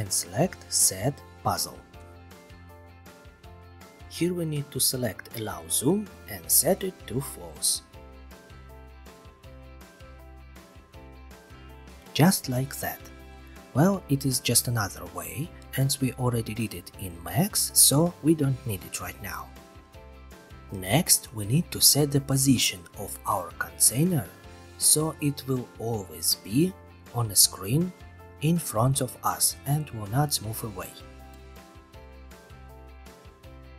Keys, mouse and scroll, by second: 1.2 click, 2.3 click, 5.4 click, 6.4 click, 6.6 click, 9.5 click, 9.5-10.4 typing, 11.0 click, 13.0 click, 13.6 Delete, 16.1 middle click, 18.0 middle click, 21.3 click, 21.9 ctrl+c, 22.1 ctrl+v, 24.1 click, 24.8 click, 25.1-26.8 typing, 27.7 click, 28.6 click, 30.2 click.